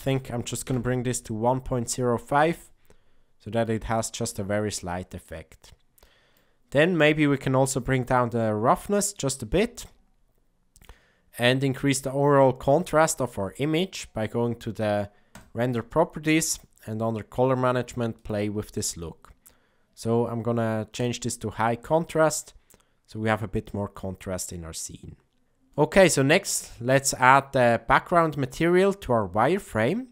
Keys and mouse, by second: 2.8-3.6 middle drag, 4.5 middle click, 6.2 middle click, 6.8 middle click, 8.2-10.8 drag, 16.5 click, 18.3-21.1 drag, 25.8 middle click.